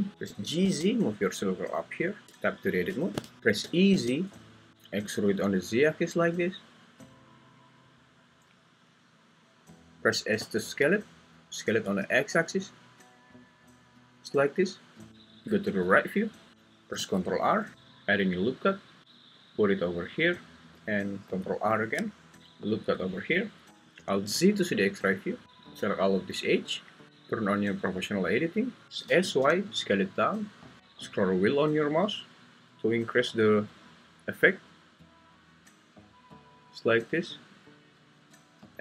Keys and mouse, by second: 0.3 g, 0.6 z, 2.2 Tab, 3.4 ctrl+z, 3.6 e, 3.9 z, 7.9 click, 10.4 s, 11.8 x, 17.6 ctrl+r, 21.7 ctrl+r, 23.1 Escape, 24.1 alt+z, 25.4 click, 27.9 click, 28.8 Escape, 29.1 s, 29.4 y.